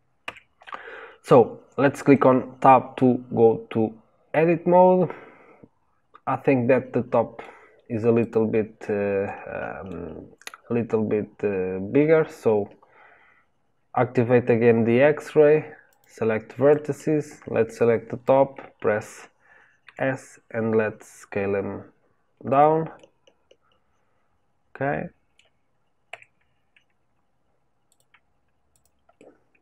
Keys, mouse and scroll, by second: 0.2 Tab, 2.1-7.3 middle drag, 7.4 scroll down 1, 8.2 click, 9.2-15.8 middle drag, 15.8 click, 16.6 click, 22.9-26.0 middle drag, 26.0 Tab, 27.8 click, 28.7 click, 29.1-29.6 middle drag.